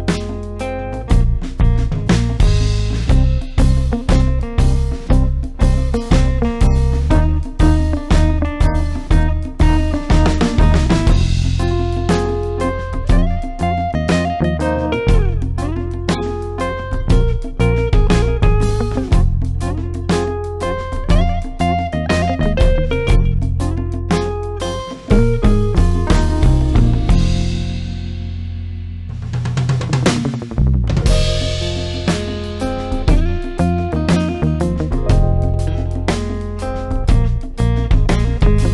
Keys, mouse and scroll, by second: 2.6 ctrl+space, 6.5 f, 7.0 space, 7.4 click, 7.4-9.2 space, 11.0 v, 12.8 click, 18.4 click, 21.6 click, 28.7 click, 31.3 ctrl+space, 31.4-32.7 typing, 31.4 ctrl+click, 33.6 Escape, 33.7 click.